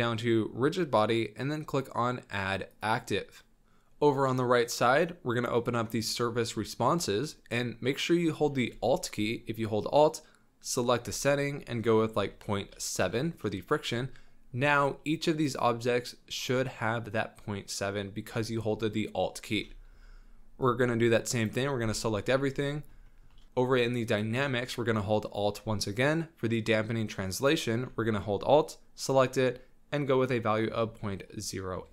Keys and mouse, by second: 3.3-5.6 middle drag, 5.8-10.8 middle drag, 10.8 alt+click, 15.6 click, 19.9 z, 20.6 click, 21.8 b, 23.0 shift+drag, 24.0 click, 27.4-31.9 alt+drag.